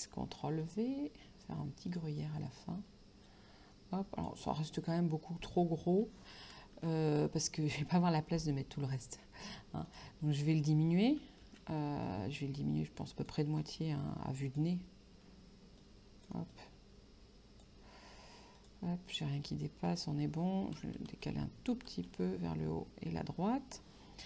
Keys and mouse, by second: 0.5 ctrl+v, 2.0 click, 3.3 click, 9.9 click, 12.1 shift+click, 13.7 click, 15.9 click, 18.6 click, 20.0 click, 20.9 Right, 22.7 Up.